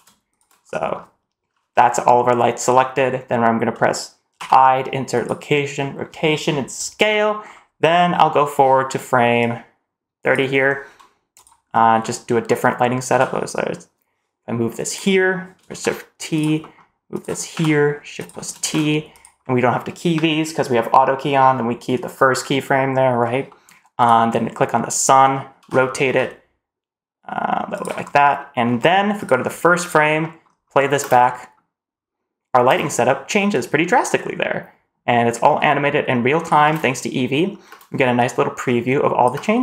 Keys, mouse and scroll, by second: 0.2 shift+click, 0.6 middle click, 0.6 click, 4.7 i, 6.9 click, 6.9 middle click, 7.4-8.3 scroll up 2, 9.3-10.2 drag, 10.6 scroll down 1, 11.3 click, 11.6-12.4 scroll up 2, 12.4 middle click, 13.0 g, 15.6 shift+t, 16.5 middle click, 17.0 click, 17.4 g, 18.5 shift+t, 19.3 middle drag, 23.4 middle click, 23.9 click, 25.5 r, 27.9-28.3 scroll up 3, 28.3 middle drag, 28.6-29.1 scroll down 1, 29.1 click, 29.7 click, 30.1 middle click, 30.4-30.9 scroll up 2, 30.9 space, 31.2 middle click, 32.6 space, 33.5-36.4 drag, 36.6 space, 37.6 space, 38.1-39.2 drag, 39.3 space.